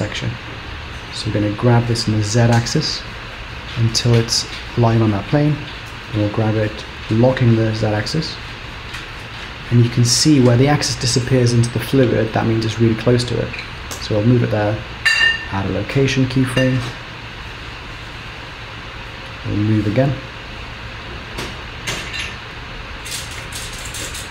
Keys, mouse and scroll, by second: 1.7 g, 5.7 g, 14.0 i, 18.0 click, 21.3 g, 24.1 i.